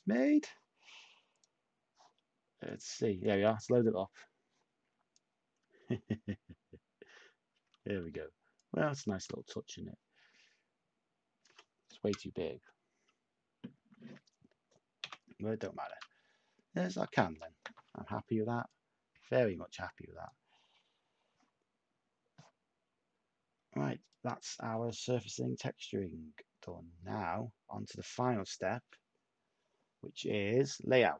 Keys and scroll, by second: 9.0 a, 15.0-17.0 typing.